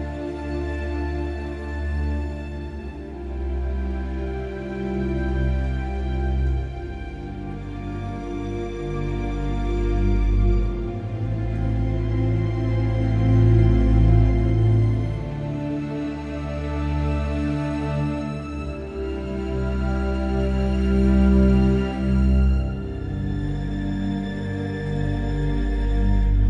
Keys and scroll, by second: 19.7 ctrl+t, 21.3 Return.